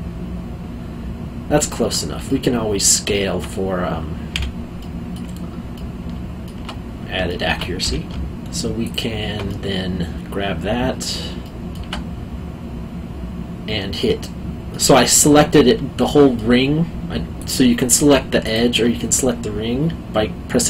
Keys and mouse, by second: 2.3 alt+middle click, 4.4 2, 4.8 middle click, 7.2 alt+middle click, 7.8 2, 8.8 alt+click, 9.4 middle click, 14.7 middle click, 16.0 alt+middle click, 17.3 click.